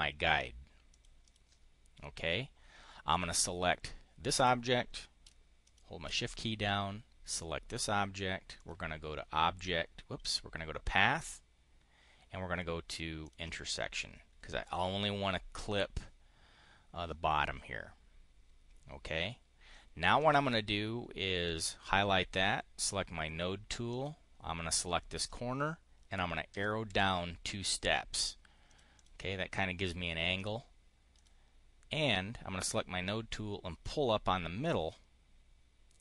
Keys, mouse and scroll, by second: 0.8 click, 1.1 click, 3.0 click, 5.5 shift+click, 8.4 click, 13.1 click, 13.8 click, 20.1 click, 21.3 click, 23.8 click, 26.4 Down, 26.8 Down, 28.6 click, 28.8 click, 30.2 click, 31.0 click, 33.7-36.0 drag.